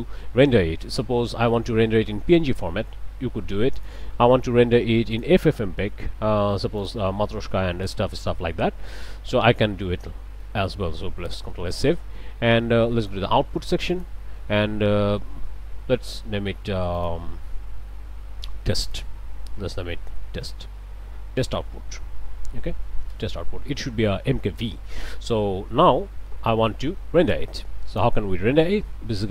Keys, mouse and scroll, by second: 1.2 click, 3.8 middle click, 5.1 click, 6.0 scroll down 2, 6.8 click, 7.7 scroll down 2, 8.5 click, 10.4 middle click, 11.4 ctrl+s, 13.9 click, 17.0 click, 18.9 click, 19.7 t, 19.8 e, 20.0 s, 20.1 t, 21.4 shift+-, 21.9 shift+o, 22.2 shift+u, 22.4 shift+t, 22.7 Return, 26.5-28.2 drag.